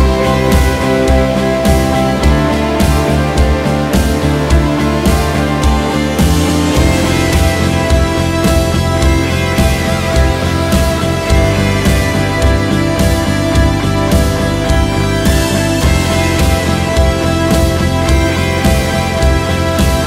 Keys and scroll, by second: 7.4 ctrl+shift+w, 9.7 Up, 10.1 Return.